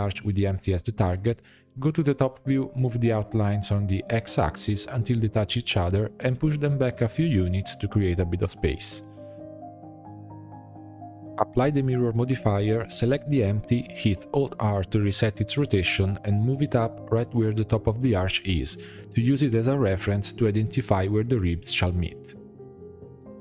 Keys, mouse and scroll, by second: 1.2 click, 2.1 click, 2.2 Tab, 2.4 a, 2.6-3.0 scroll up 2, 3.0-4.1 shift+middle drag, 4.1 g, 5.7-6.3 scroll up 7, 6.8 g, 9.9 Tab, 10.4-10.7 scroll down 4, 10.7-12.2 middle drag, 12.2-13.0 drag, 13.0-14.2 middle drag, 14.2 click, 14.9 click, 15.6 alt+r, 15.8 scroll down 4, 16.1-16.9 middle drag, 16.9 g, 19.7-20.2 middle drag, 20.2 click, 22.2-22.8 middle drag, 22.8 shift+a.